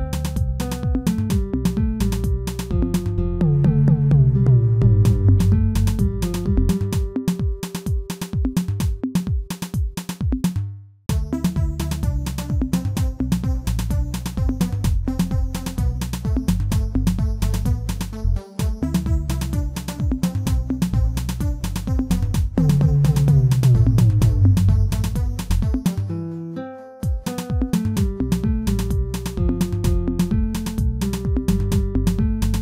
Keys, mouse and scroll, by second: 3.1 click, 4.3-4.7 scroll down 2, 4.7-6.1 middle drag, 6.1-8.2 scroll up 1, 8.2-11.3 middle drag, 9.2-9.7 scroll down 3, 11.3 click, 12.2 Tab, 12.5-13.8 scroll up 4, 13.8 scroll up 1, 14.0 ctrl+r, 15.7 Tab, 16.0-17.5 scroll down 1, 17.5 middle click, 18.4-18.7 scroll up 1, 18.7-20.2 middle drag, 20.2-20.8 scroll down 1, 20.8-21.9 scroll down 1, 21.9 alt+h, 22.5-23.1 scroll down 1, 23.1 click, 23.9-24.5 scroll down 2, 24.9-25.2 scroll up 2, 25.6 click, 26.0-27.2 scroll down 2, 27.6 KP_1, 28.3-28.7 scroll up 1, 28.7 shift+middle click, 29.1 scroll up 2, 29.7-31.3 shift+middle drag, 31.3 click.